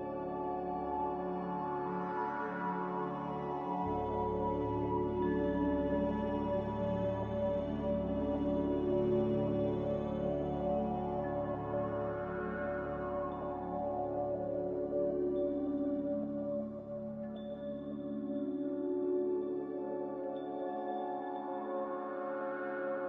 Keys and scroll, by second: 10.3 a, 17.5-18.7 typing.